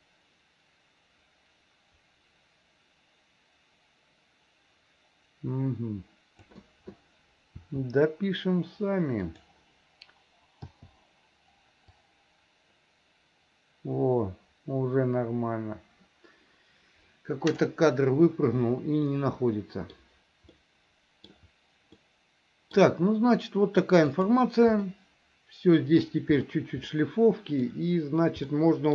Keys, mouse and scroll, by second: 7.7 r, 10.7 i, 12.0-17.7 drag, 19.1 middle click, 20.5 middle click, 22.0 middle click, 24.1 click, 24.9-26.0 middle drag, 26.9 middle click, 28.5 middle click.